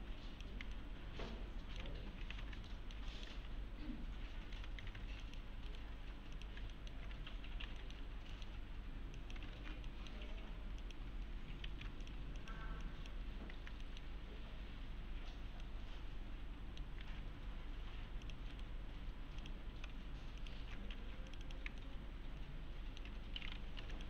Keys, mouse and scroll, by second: 0.8-2.0 alt+middle click, 1.9 1, 2.3 alt+q, 2.7 alt+middle click, 3.3 3, 4.5 s, 5.2 click, 5.7 right click, 6.3 click, 6.7 alt+middle click, 7.1 alt+1, 7.4-7.7 scroll up 1, 7.8 alt+middle click, 8.0 alt+scroll down 1, 8.3 middle click, 9.2 click, 9.6 ctrl+shift+e, 9.9 middle click, 10.4-10.8 scroll up 1, 10.8 click, 11.7 ctrl+z, 12.0 click, 12.8 ctrl+click, 13.6 ctrl+shift+e, 13.8 middle click, 15.6-16.9 alt+middle click, 17.1 alt+1, 18.2 click, 18.5 right click, 19.4 click, 20.4 ctrl+click, 20.6 ctrl+shift+e, 20.9 2, 21.3 click, 21.8-23.1 alt+middle click, 23.9 click.